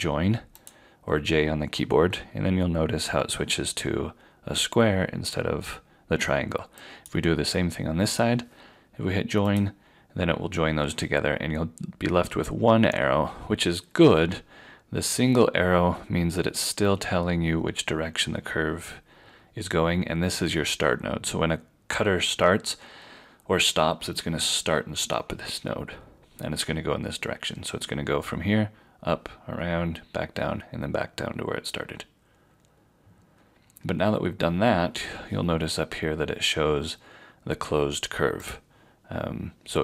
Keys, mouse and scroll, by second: 38.4 click.